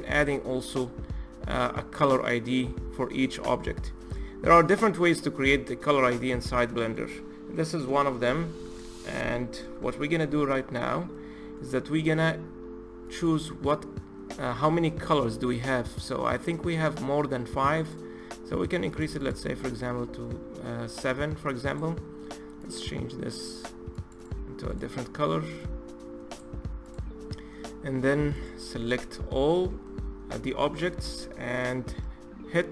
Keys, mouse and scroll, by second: 3.3-8.6 middle drag, 8.6-9.0 scroll up 3, 9.0-18.7 middle drag, 18.7-22.3 drag, 23.8 click, 25.3 click, 26.6 click, 28.1 click, 28.4 a, 29.5-32.7 middle drag.